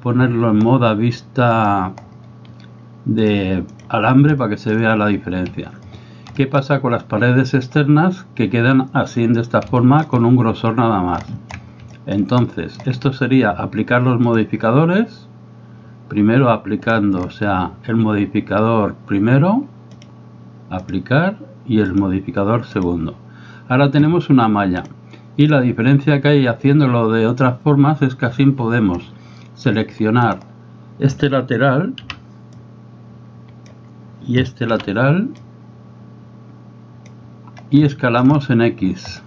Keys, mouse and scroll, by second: 1.6 click, 3.8 click, 4.4 shift+middle drag, 6.4 shift+middle drag, 9.8 shift+middle click, 12.0 shift+middle click, 12.5-12.8 shift+middle drag, 20.1-20.9 drag, 22.0-22.9 drag, 24.9-25.6 drag, 30.3 click, 32.0 b, 34.8 b, 37.9 shift+middle click.